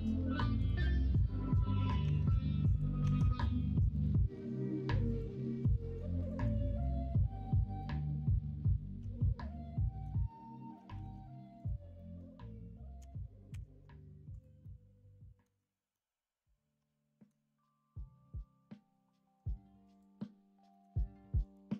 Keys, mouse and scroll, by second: 1.0-3.0 drag, 3.0 Tab, 3.4 middle click, 4.3 Tab, 6.5 middle click, 7.7-10.0 middle drag, 10.7 middle click, 11.0 ctrl+s, 11.9 middle click, 13.5 ctrl+KP_Subtract, 14.6-15.4 middle drag, 15.9-17.3 middle drag, 20.7 middle click.